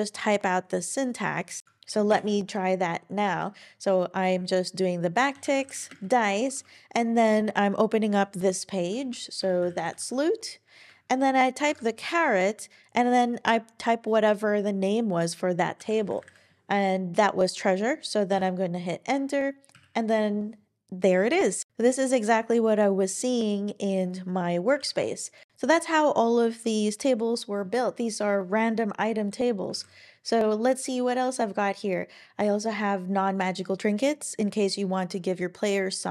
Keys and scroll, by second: 1.6 shift+super+Home, 2.1 BackSpace, 3.2 `, 5.3-6.4 typing, 9.3-12.1 typing, 15.7-16.7 typing, 18.3 Return, 19.7 Up, 21.7 super+e, 24.8 super+e, 25.5 super+w, 29.7 super+e.